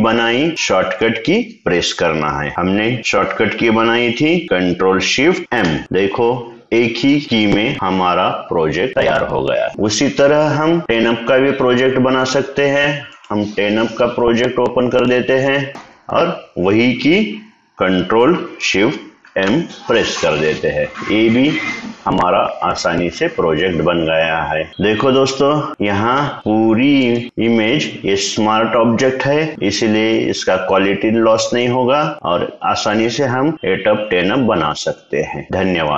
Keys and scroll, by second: 5.8 shift+m, 20.9 ctrl+shift+m.